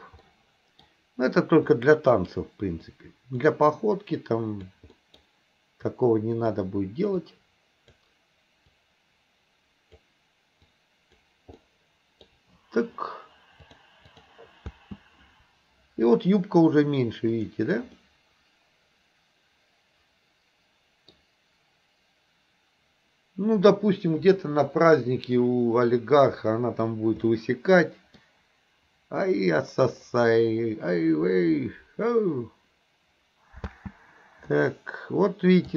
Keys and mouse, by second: 0.3 middle click, 1.8 click, 2.9 click, 4.0 click, 5.0 middle click, 5.9 click, 7.3 click, 8.8-10.1 drag, 10.7 click, 11.6 middle click, 13.9-14.3 drag, 14.7 space, 17.4 click, 18.1-21.2 middle drag, 25.5-27.0 middle drag, 27.4-28.3 middle drag, 33.7 space, 34.5-35.7 middle drag.